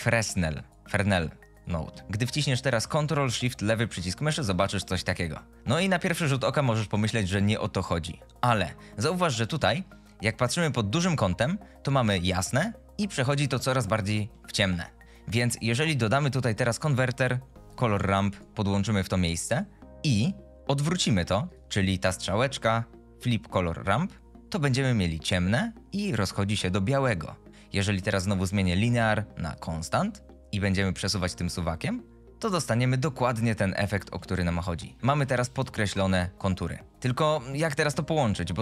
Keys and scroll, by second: 16.1 shift+a.